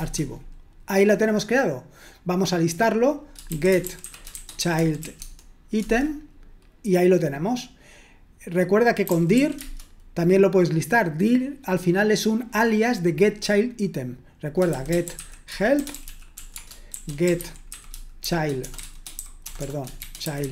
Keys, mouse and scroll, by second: 3.6-5.8 typing, 9.1-9.8 typing, 14.8-20.5 typing.